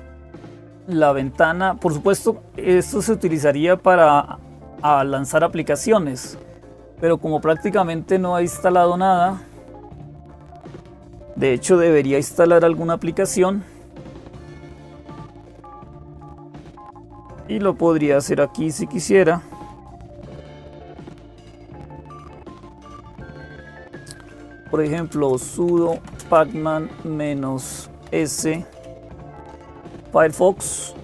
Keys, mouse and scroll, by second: 0.0-31.0 typing.